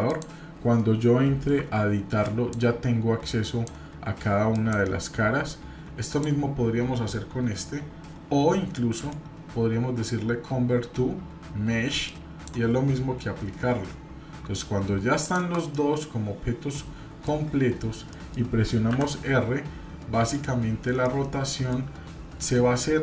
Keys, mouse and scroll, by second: 0.0 click, 1.6 Tab, 2.2 click, 2.9 scroll up 1, 3.4 click, 4.5 click, 5.2 Tab, 6.1 click, 8.9-12.5 right drag, 15.2 shift+click, 15.7-17.3 middle drag, 18.1 middle click, 18.9 r, 20.7-21.7 scroll down 3, 21.0-21.7 middle drag.